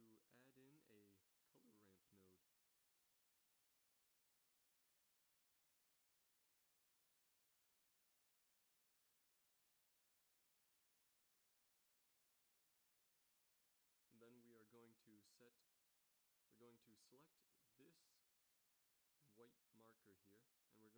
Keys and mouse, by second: 1.9 g, 3.0 middle click, 5.0 middle click, 6.6 shift+a, 13.5-15.3 middle drag, 17.9-19.7 middle drag.